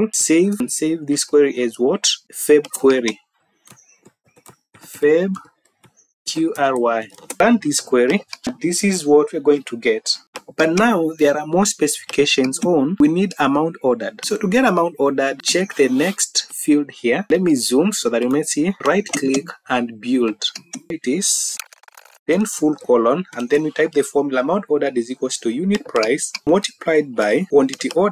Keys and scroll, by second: 0.2 ctrl+s, 3.8 Caps_Lock, 4.3-6.5 typing, 6.7 Return.